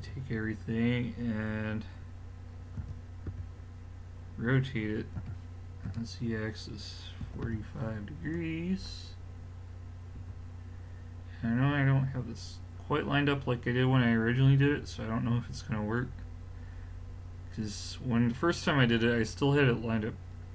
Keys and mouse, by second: 0.0 a, 2.8 KP_7, 3.3 KP_5, 5.2 r, 9.4-12.3 middle drag, 10.2 a, 15.9-16.6 middle drag.